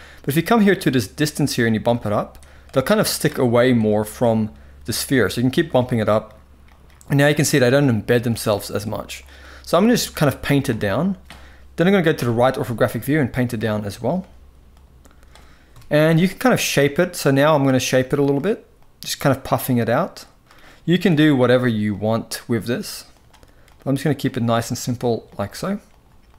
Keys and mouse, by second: 1.6 drag, 2.1-2.9 drag, 3.5-3.8 drag, 5.2 click, 5.3 click, 5.7 drag, 6.4 drag, 7.2 drag, 7.9 shift+middle drag, 8.9 drag, 9.5 click, 10.1 click, 11.8 KP_3, 12.7-13.2 drag, 13.6 drag, 14.4 click, 15.4 KP_1, 16.2-16.6 drag, 16.9 click, 17.4 click, 17.8 click, 18.5 click, 19.3 click, 19.9 click, 20.7 KP_7, 21.6 click, 22.2 click, 22.8 click, 23.4 click, 23.9 click, 24.5 click, 24.9 click, 25.6 click, 26.0 click.